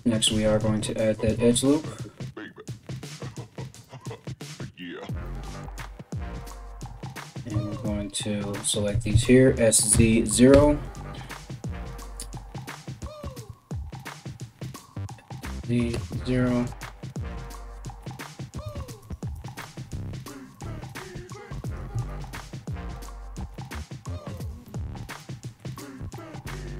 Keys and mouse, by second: 0.9 z, 6.1 right click, 6.2 middle click, 7.0 ctrl+right click, 7.1-26.7 ctrl+middle drag, 8.5 s, 12.8 right click, 13.6 ctrl+right click, 14.2 s, 16.8 right click, 17.6 g, 18.6 click, 19.0 click, 19.5 g, 20.5 click, 20.6 g, 21.3 click, 21.7 ctrl+click, 22.3 g, 23.2 g.